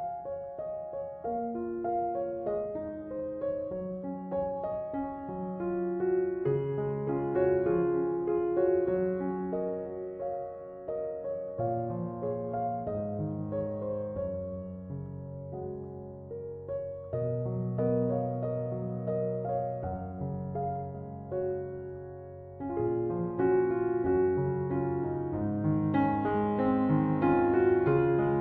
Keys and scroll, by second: 0.7 f, 3.5-4.7 typing.